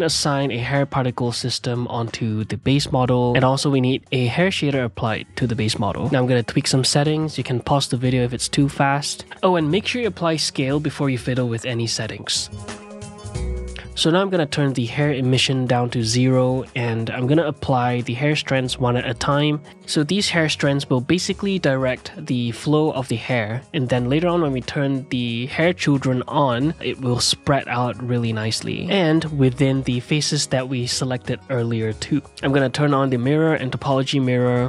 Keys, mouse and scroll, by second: 0.0-1.9 drag, 3.4-5.3 drag, 6.1-8.0 drag, 8.1-8.7 scroll down 1, 8.7-11.7 drag, 11.7 middle click, 12.5-15.5 drag, 15.5 middle drag, 15.8 ctrl+Tab, 17.6-19.5 ctrl+middle drag, 19.5-23.4 drag, 23.4-24.9 shift+middle drag, 24.9 n, 27.3 click, 28.6-29.0 drag, 30.0-32.2 drag, 32.4 click, 33.1 ctrl+z, 33.4 click, 34.2 click, 34.5 middle drag.